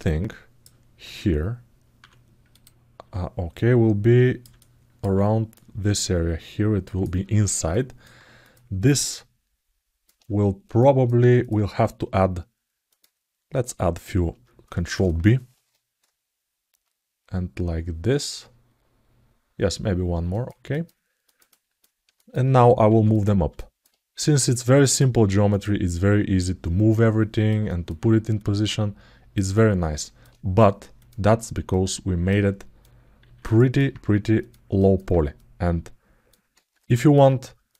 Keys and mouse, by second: 2.3 click, 3.3 click, 4.3 alt+middle click, 5.4-6.8 drag, 7.5 alt+middle click, 8.2 click, 8.9 alt+middle click, 10.5 alt+shift+middle click, 11.1 middle click, 12.7 middle click, 15.2 ctrl+b, 20.5 click, 21.0 middle click, 21.3 ctrl+alt+middle click, 21.9 alt+shift+middle click, 22.7 2, 22.9 click, 23.3 alt+middle click, 24.0 click, 25.3 click, 26.2-27.2 drag, 27.4 alt+middle click, 28.2 right click, 29.3 alt+middle click, 30.8 click, 31.4 click, 32.3 alt+middle click, 33.0 alt+z, 33.3 middle click, 34.2 click, 34.5 middle click, 35.2 click, 36.3 alt+z, 36.7 middle click, 37.5 click.